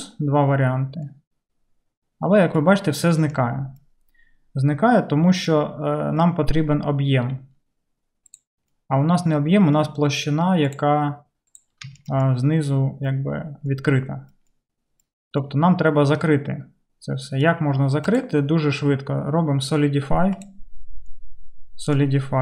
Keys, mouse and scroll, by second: 5.8-11.1 middle drag, 8.5 click, 10.7-18.1 drag, 20.5-22.4 drag.